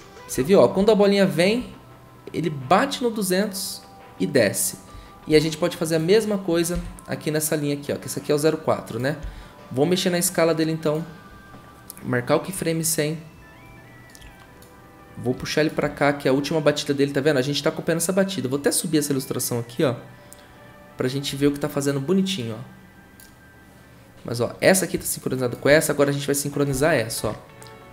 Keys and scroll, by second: 6.7 v, 9.2 s.